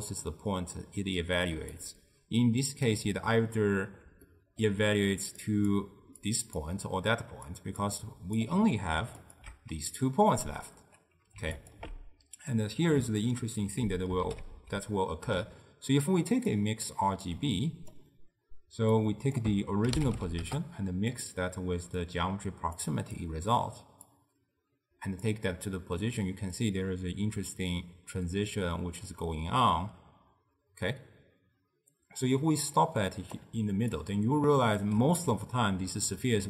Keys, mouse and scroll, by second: 1.6 d, 1.8-3.0 right drag, 3.0-8.5 typing, 4.4 middle click, 5.5 click, 6.3 click, 7.6 click, 8.1 click, 9.3 alt+shift+click, 11.7 alt+shift+click, 13.7 ctrl+a, 17.4 click, 19.0 click, 22.1 drag, 23.2 click, 24.2 drag, 26.7-29.7 drag, 33.7 d, 34.0 right click, 34.9 d, 35.2 d, 36.4 scroll up 2.